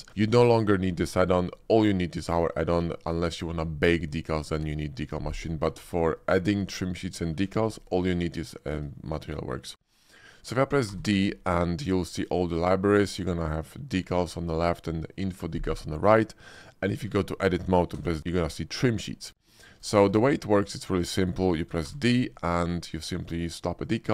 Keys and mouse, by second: 6.1 shift+drag, 7.0 shift+drag, 8.9 shift+click, 10.8 d, 17.1 Tab, 17.9 d, 20.0 Tab, 20.8 shift+click, 21.2 middle click, 21.5 shift+middle drag, 23.1 d.